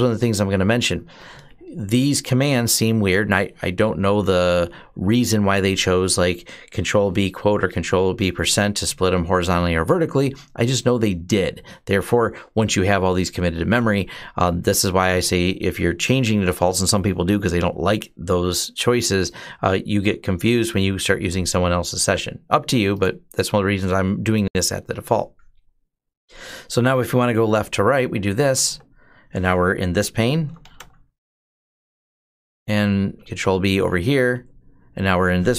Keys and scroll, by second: 27.9 ctrl+b, 28.4 Right, 29.9-32.1 typing, 32.9 ctrl+b, 34.1 Left, 35.3-35.5 typing.